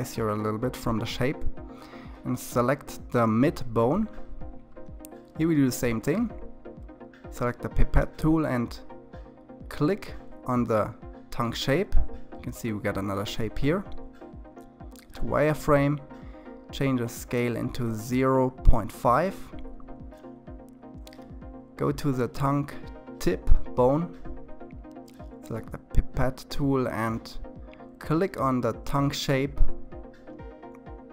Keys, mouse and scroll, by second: 6.7 click, 13.9 drag, 15.0-19.0 drag, 21.1 click, 26.5 click.